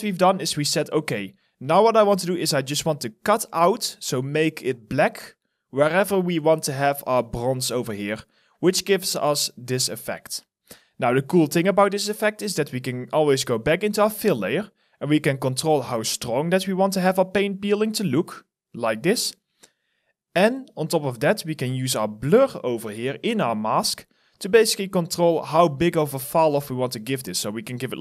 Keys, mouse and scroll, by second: 2.0 alt+middle click, 2.5 alt+right click, 3.6 alt+click, 7.9 alt+right click, 8.7 alt+click, 9.3 alt+middle click, 9.6 alt+right click, 16.9 alt+right click, 17.4 alt+middle click, 18.0 alt+click, 23.2 alt+middle click, 23.6 alt+right click, 24.1 alt+middle click.